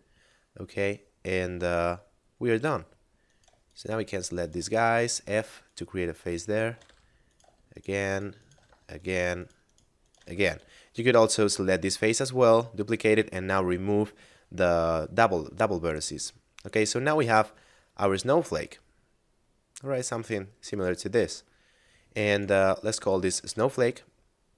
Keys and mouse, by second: 3.2 right click, 3.7 shift+right click, 4.1 shift+right click, 4.4 shift+right click, 4.7 f, 5.2 right click, 5.6 shift+right click, 6.0 shift+right click, 6.4 shift+right click, 6.6 f, 7.3 right click, 7.7 shift+right click, 8.1 shift+right click, 8.4 shift+right click, 8.6 f, 8.9 right click, 9.3 shift+right click, 9.7 shift+right click, 10.0 shift+right click, 10.2 f, 10.2 a, 15.7 middle click, 17.2 Tab, 18.5 middle click, 21.0 a, 22.3 right click, 23.2 shift+space.